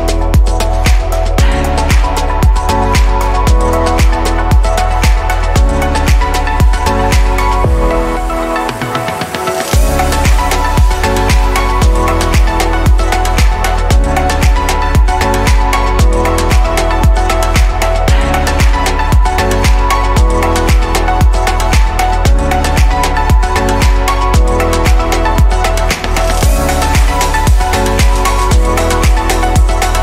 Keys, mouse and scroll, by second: 5.6 click, 6.4-7.4 shift+middle drag, 7.4 click, 8.4 shift+d, 9.8 click, 12.1-13.2 scroll up 4, 13.2-13.9 shift+middle drag, 13.9-15.7 scroll up 1, 15.7-21.0 drag, 25.4-30.0 middle drag.